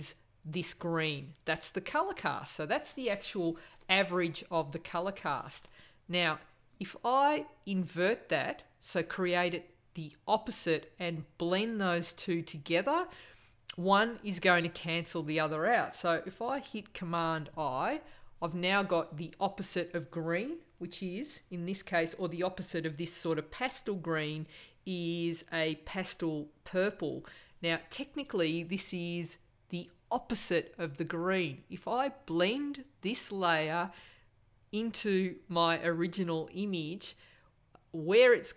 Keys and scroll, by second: 17.5 super+i.